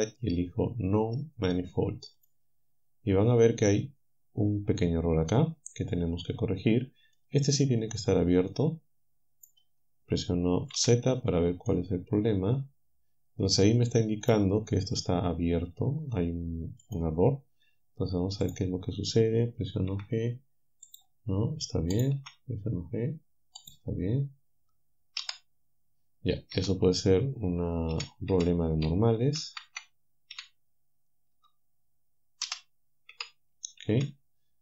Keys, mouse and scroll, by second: 2.2 click, 6.3-7.3 drag, 8.5-9.7 drag, 10.8 z, 11.7-14.5 drag, 16.9 click, 19.9 g, 22.2 g, 25.2 z, 26.6 z, 28.0 a, 29.4 ctrl+n, 30.3 a, 32.5 z, 33.1 Tab.